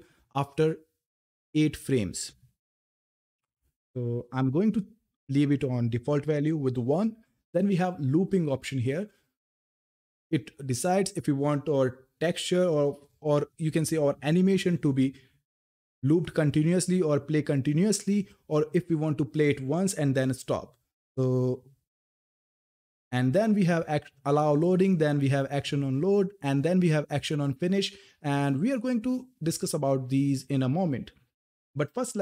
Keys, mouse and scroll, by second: 6.0 Return.